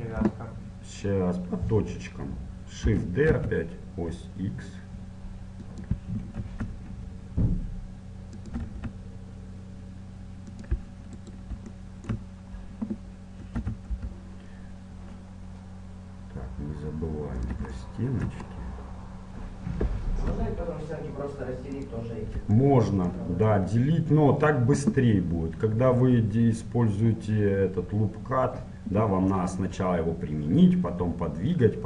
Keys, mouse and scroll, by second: 2.9 shift+d, 6.4 e, 8.6 e, 11.3 right click, 11.8 middle click, 12.1-13.1 right drag, 13.1 middle click, 13.6 e, 14.0 middle click, 17.9-20.5 middle drag, 20.3 e, 22.6-24.5 middle drag.